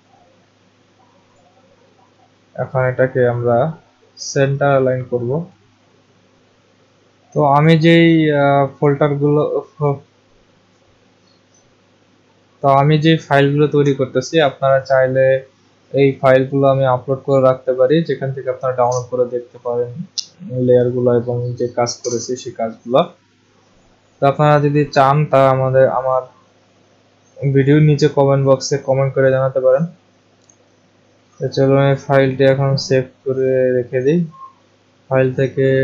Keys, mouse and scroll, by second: 1.3 click, 2.8 click, 31.1 click, 34.3 click.